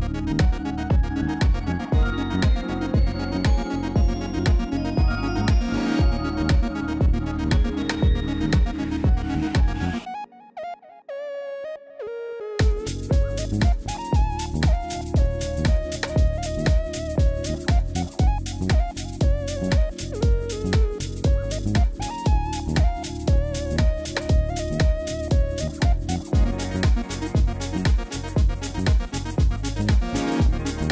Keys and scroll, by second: 2.8 u, 7.0 Tab, 12.6 Tab, 14.4 ctrl+z.